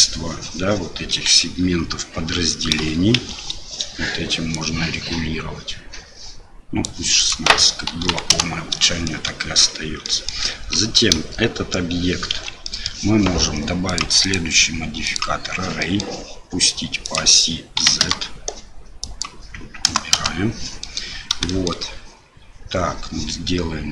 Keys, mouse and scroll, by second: 1.1 KP_1, 3.2 shift+z, 4.6-6.8 drag, 7.3-8.8 drag, 9.0 shift+middle drag, 10.0 middle drag, 12.3 shift+z, 12.6 middle drag, 14.3-15.2 drag, 15.8 middle click, 17.1-18.5 drag, 19.1-20.5 drag, 20.8 middle drag, 21.5 shift+middle drag.